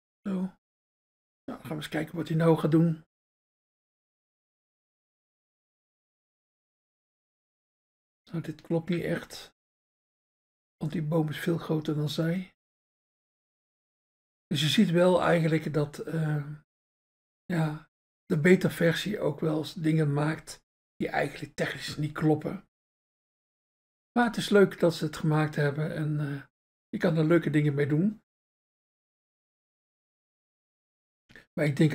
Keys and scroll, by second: 0.6 Return.